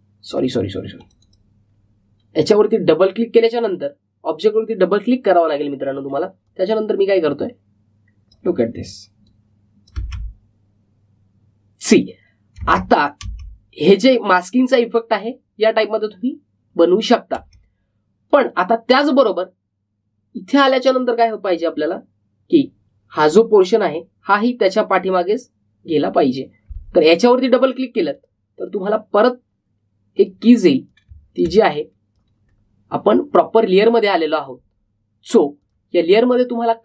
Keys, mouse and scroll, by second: 7.4-10.9 drag, 10.9 space, 13.6 space, 18.3 space, 19.2-24.8 drag, 25.9 click, 29.1 click, 32.6-36.6 drag.